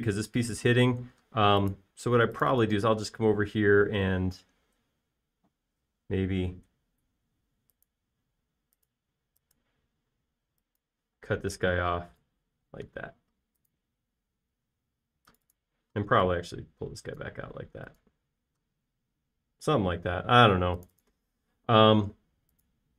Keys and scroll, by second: 4.3 i, 12.2 p, 13.6 space, 15.8 typing, 17.1 p, 18.5 space, 19.8 typing.